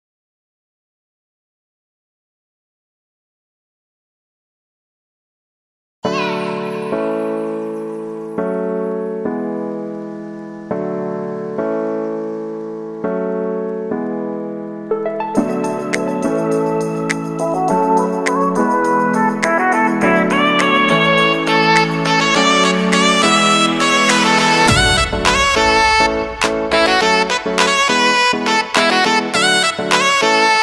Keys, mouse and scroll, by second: 0.7 shift+n, 1.1 shift+i, 2.5 n, 5.0-6.1 typing, 7.6-8.3 typing, 8.8 ctrl+a, 10.0 shift+f, 10.9 g, 12.4 shift+space, 12.6 shift+c, 15.0 click, 18.8 typing, 21.4 click, 24.2 ctrl+a, 25.4-28.8 typing.